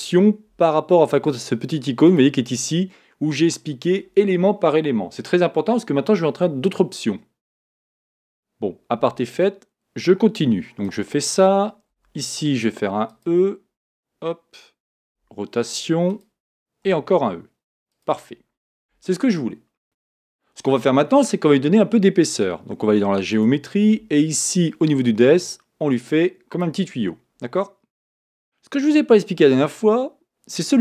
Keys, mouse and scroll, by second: 2.1 click, 9.1 r, 11.9 e, 15.1 r, 16.9 e, 23.3-27.4 drag, 27.4-30.8 middle drag.